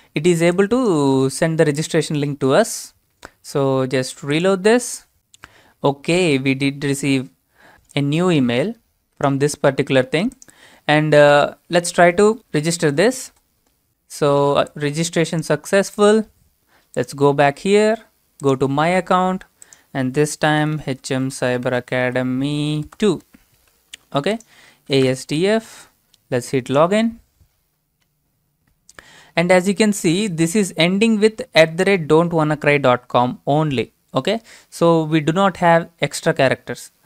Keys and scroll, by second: 20.4-23.5 typing, 24.8-27.2 typing.